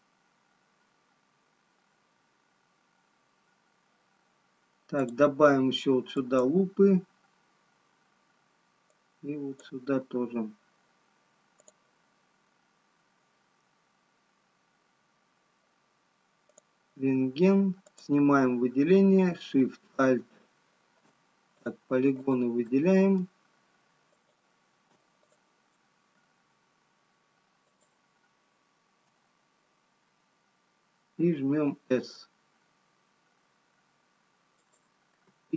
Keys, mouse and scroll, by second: 1.7 scroll up 2, 6.1 click, 10.7 click, 17.0 click, 18.5 click, 26.0 alt+shift+click, 26.1 alt+shift+click, 28.5 alt+shift+click, 33.5 s.